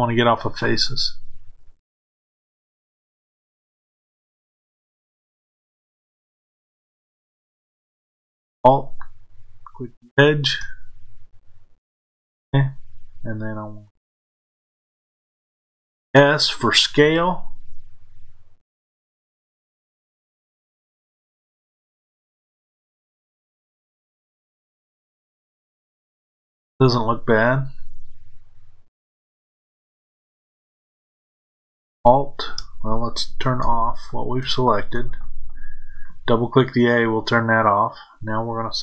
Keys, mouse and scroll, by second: 3.5 click, 5.3 click, 8.8 alt+click, 25.7 click.